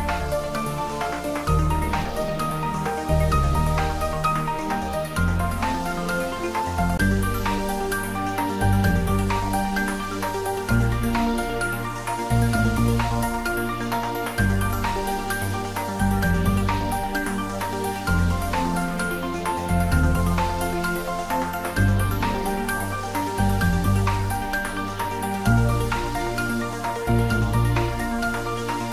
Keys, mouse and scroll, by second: 2.9 click, 6.6 click, 9.5-11.8 scroll down 1, 13.2 click, 15.3 ctrl+z, 17.8-18.4 scroll down 2, 18.4-19.8 scroll down 1, 20.3 ctrl+z, 23.3-24.0 scroll down 1, 27.0-28.9 middle drag.